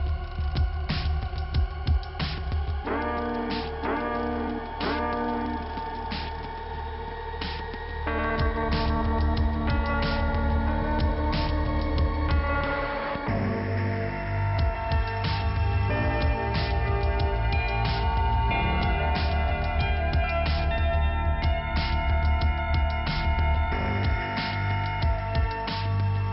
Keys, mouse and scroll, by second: 2.6 click, 6.9 click, 8.7 click, 8.9 click, 9.7 click, 11.0 click, 12.5 click, 12.5 click, 13.3 click, 13.6 click, 14.6 scroll down 2, 16.4 click, 17.2 scroll down 2, 18.4 p, 19.2-19.9 scroll down 2, 19.9 click, 20.1 click, 20.5 click, 20.6 double click, 21.0 scroll up 1, 21.3 click, 22.2 click, 24.5 scroll up 1, 25.5 click.